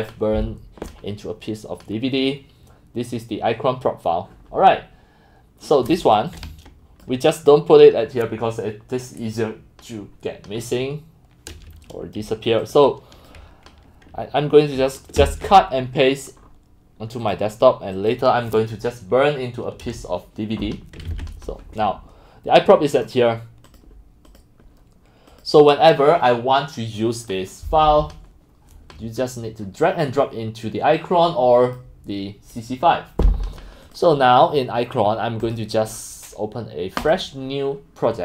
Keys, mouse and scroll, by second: 1.5 click, 2.2 click, 6.1-7.0 scroll up 2, 6.3 drag, 7.1 click, 12.6 click, 12.9 click, 15.2 ctrl+x, 16.4 scroll, 16.4-17.3 scroll down 4, 17.3 click, 21.1 ctrl+v, 23.0 right click, 23.1-23.6 right drag, 23.8 drag, 24.1 click, 25.4 click, 30.4 click, 31.0 click, 31.0 scroll up 1, 31.1 drag, 31.8-34.8 drag, 35.5 click.